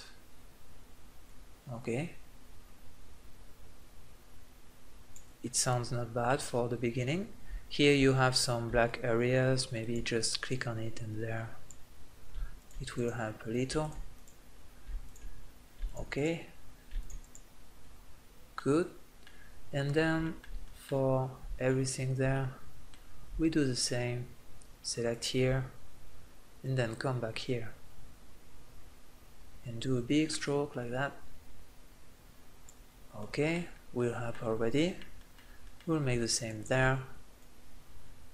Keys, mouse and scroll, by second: 5.7 middle click, 6.5 middle click, 9.5-12.0 drag, 18.1 middle click, 19.3 click, 23.8-24.9 middle drag, 24.9-28.1 drag, 32.6-35.5 middle drag, 36.3-38.3 drag.